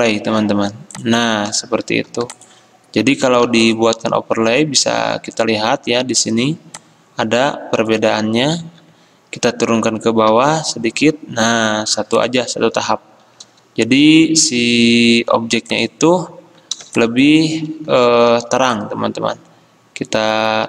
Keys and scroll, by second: 2.1 c, 3.5 v, 8.7 ctrl+z, 10.4 ctrl+[, 18.3 r.